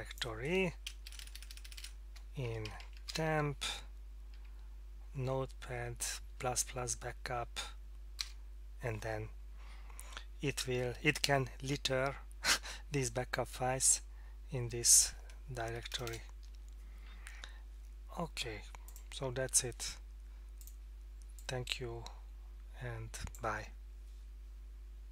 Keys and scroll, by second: 1.0-1.8 typing, 2.7 Down, 2.8 Down, 3.1 Return, 4.4 Down, 4.9 Down, 5.0 Down, 5.5 Down, 8.2 Return, 15.7 BackSpace, 15.9 BackSpace, 16.0 BackSpace.